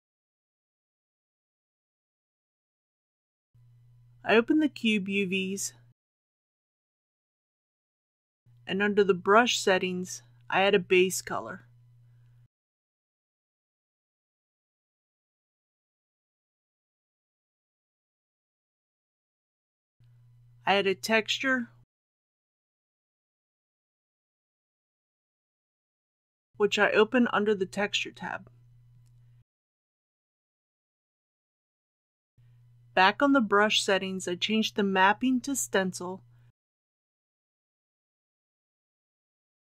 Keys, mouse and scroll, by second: 5.9-6.3 scroll down 1, 6.3-7.5 scroll up 1, 9.7 click, 18.8-19.1 scroll up 1, 20.0 click, 23.8-25.4 typing, 25.6 Return, 26.5-27.9 scroll up 1, 27.9 click, 35.3-36.9 scroll down 1, 39.3 click.